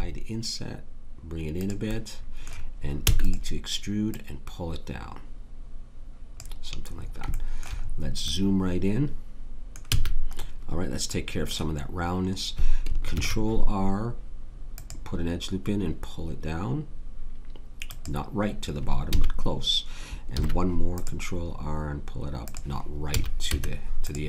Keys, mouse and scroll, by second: 1.9-3.0 drag, 3.0 e, 9.9 a, 13.1 ctrl+r, 19.0 a, 20.3 ctrl+r, 23.1 a, 23.5 Tab.